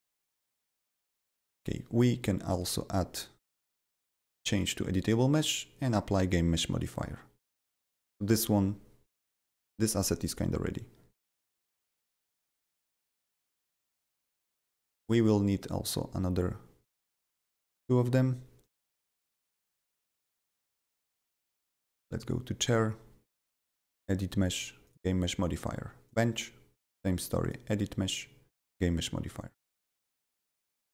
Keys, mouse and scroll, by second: 3.9 right click, 5.9 click, 15.0 click, 15.9 click, 16.8 click, 17.5 click, 18.6 click, 21.4 click, 23.3 right click, 23.9 click, 24.8 click, 26.0 click, 26.8 right click, 27.4 click, 28.6 click, 29.8 click, 30.8-30.9 drag.